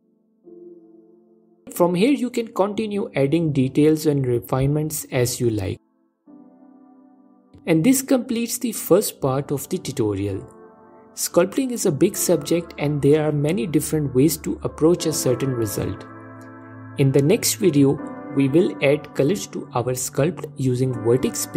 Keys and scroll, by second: 1.7 ctrl+z.